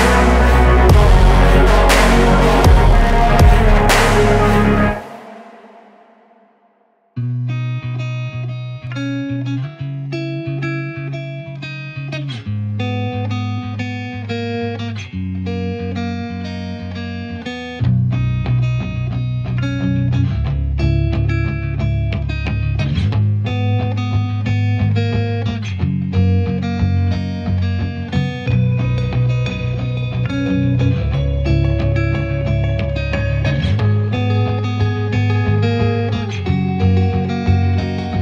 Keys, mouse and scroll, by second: 0.0 shift+click, 0.6-2.0 drag, 2.5 click, 3.5-3.9 drag, 4.3-4.9 drag, 5.0 shift+drag, 5.2 shift+click, 5.3 shift+click, 5.7 shift+click, 6.3 ctrl+c, 6.5 ctrl+v, 6.6 shift+Left, 6.7 r, 8.2-8.8 middle drag, 8.8 ctrl+c, 8.9 ctrl+v, 9.1 r, 10.1-10.5 middle drag, 10.5 g, 12.2 g, 13.8-14.3 middle drag, 14.3 shift+drag, 14.4 shift+click, 14.6 shift+click, 14.8 shift+drag, 15.0 shift+drag, 15.3 shift+click, 15.5-15.9 scroll down 1, 15.9 KP_0, 16.3 r, 17.1 shift+click, 17.5 r, 18.2-18.5 scroll down 2, 18.5 g, 20.1 r, 20.7 shift+middle click, 20.9 scroll up 1, 21.1 g, 22.0 r, 22.5 s, 24.5 shift+middle click, 25.0 r, 25.8 g, 26.8 g, 28.1-31.3 typing, 32.0-32.6 middle drag, 32.6 KP_0, 33.0 click, 33.2-33.6 scroll down 4, 33.6-34.0 scroll up 2, 34.0 scroll down 1, 34.4 scroll up 1, 34.7 click, 34.9 shift+drag, 35.1 shift+click, 35.3 shift+drag, 35.4 shift+drag, 35.6 shift+drag, 35.8 shift+drag, 35.9-36.2 middle drag, 36.2 scroll up 3, 36.6 shift+click, 36.7 shift+click, 36.9 shift+click, 37.1 shift+click, 37.3 shift+click, 38.1 g.